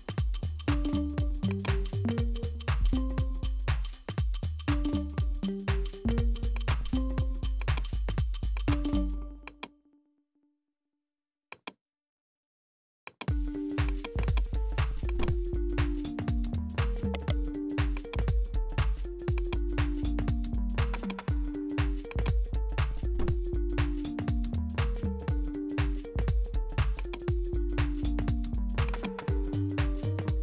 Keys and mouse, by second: 6.5 click, 7.6-8.6 drag, 9.5-11.6 drag, 13.1 click, 13.8 click, 14.2 click, 15.1 click, 17.1 right click, 18.0-19.5 drag, 21.0 click, 21.5 click, 29.3 click.